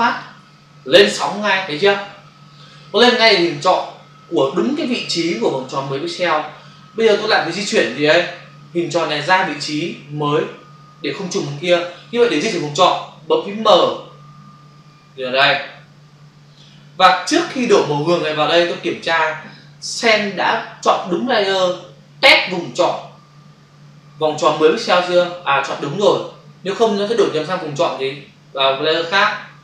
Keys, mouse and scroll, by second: 0.1 ctrl+click, 13.7 m, 14.9 click, 17.1 click.